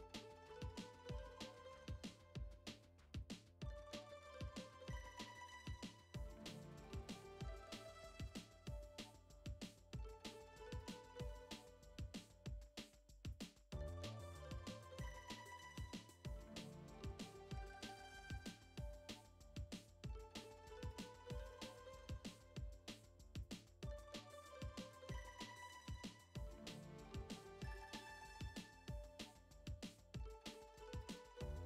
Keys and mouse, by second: 0.5-1.3 drag, 1.8 click, 2.4 middle click, 4.5 click, 5.5-6.4 drag, 7.3 shift+middle click, 10.2-10.7 drag, 11.1-12.0 drag, 12.1-12.8 drag, 13.0 shift+a, 16.2 click, 16.6 ctrl+t, 17.0-17.4 middle drag, 17.4 click, 18.2 click, 20.3 click, 20.8 click, 21.4 click, 22.1 middle click, 23.2 click, 24.3 click, 26.0 shift+middle drag, 26.5-27.7 drag, 27.7 middle click, 28.4-29.9 drag, 30.5 shift+middle click.